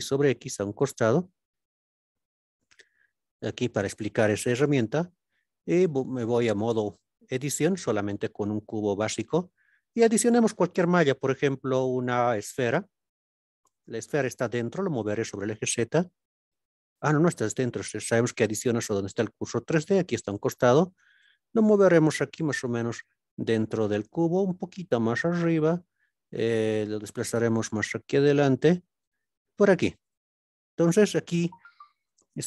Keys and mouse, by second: 0.7 click, 2.9 click, 3.9-4.3 shift+middle drag, 5.8 Tab, 6.5-6.9 middle drag, 7.3 KP_Decimal, 9.0 click, 9.7 middle click, 10.7 shift+a, 15.3 z, 16.8 right click, 18.1 click, 20.8 g, 21.1 x, 22.9 click, 23.7-24.1 middle drag, 24.6 g, 24.9 z, 25.7 click, 26.3 g, 27.0 y, 28.1 click, 28.6 g, 28.9 x, 30.0 click, 30.4-31.0 middle drag, 32.0 click.